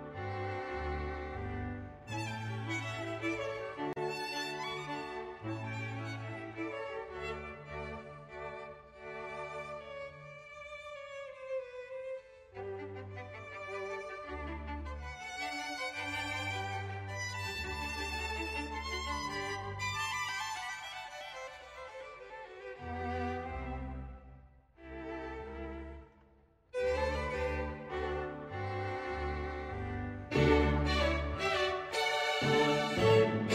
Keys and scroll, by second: 0.0 Page_Down, 0.5 Page_Down, 0.9 Page_Down, 1.1 Page_Down, 1.5 Page_Down, 1.6 Page_Down, 1.8 Page_Down, 2.3 Page_Down, 2.6 Page_Down, 3.1 Page_Down, 3.2 Page_Down, 3.4 Page_Down, 3.8 space, 3.9 Page_Up, 3.9 Page_Down, 4.2 Page_Down, 5.2 Page_Down, 5.4 Page_Down, 5.6 Page_Down, 5.8 Page_Down, 6.0 Page_Down, 6.3 Page_Down, 6.5 Page_Down, 6.7 Page_Down, 6.9 Page_Down, 7.2 Page_Down, 7.4 Page_Down, 8.4 Page_Down, 8.9 Page_Down, 11.8 Page_Up, 11.9 Page_Down, 12.1 Page_Down, 13.2 Page_Up, 13.3 Page_Down, 13.8 Page_Down, 14.3 Page_Down, 14.5 Page_Down, 15.8 Page_Down, 16.1 Page_Down, 16.7 Page_Down, 17.1 Page_Down, 17.5 space, 17.9 Page_Down, 18.5 Page_Down, 19.0 Page_Down, 19.2 Page_Down, 19.8 Page_Up, 19.8 Page_Down, 19.9 Page_Up, 20.0 Page_Down, 20.8 space, 22.4 Page_Down, 22.9 Page_Up, 23.3 Page_Up, 23.4 Page_Down, 23.5 Page_Up, 23.9 Page_Down, 24.0 Page_Up, 24.2 Page_Down, 24.7 ctrl+z, 25.2 Page_Down, 25.4 Page_Down, 25.7 Page_Up, 25.9 Page_Down, 26.3 Page_Down, 26.8 Page_Down, 27.2 Page_Down, 27.4 Page_Down, 27.6 Page_Down, 28.2 Page_Down, 28.5 Page_Down, 29.1 Page_Down, 29.8 Page_Down, 30.9 Page_Down, 32.2 Page_Down, 32.5 Page_Down, 32.7 Page_Up, 32.8 Page_Down, 32.9 Page_Up, 33.0 Page_Down, 33.4 Page_Down.